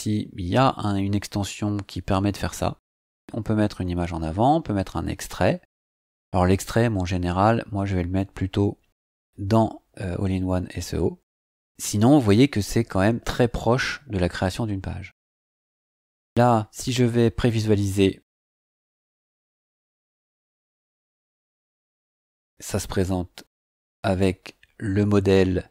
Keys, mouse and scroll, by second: 3.8 scroll down 2, 5.5-6.3 scroll down 2, 6.3-10.8 scroll up 4, 11.8-12.1 scroll up 2, 17.3 click, 18.8 click, 24.7-25.1 scroll down 1, 25.5-25.7 scroll up 4.